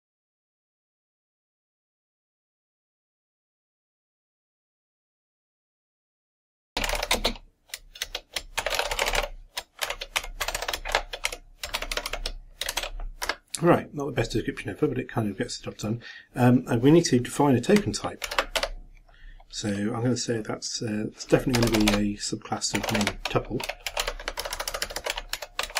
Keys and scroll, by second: 0.0-2.5 typing, 4.9-6.9 typing, 8.3-12.2 typing, 12.7 Return, 13.2 shift+Up, 18.2 ctrl+m, 18.6 ctrl+a, 25.5-25.7 typing.